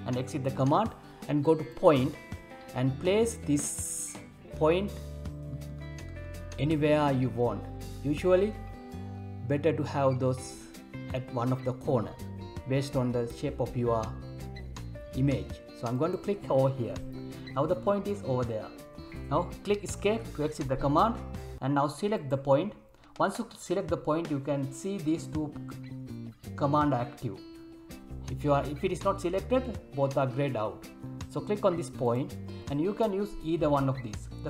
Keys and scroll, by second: 20.0 Escape, 28.9 Escape.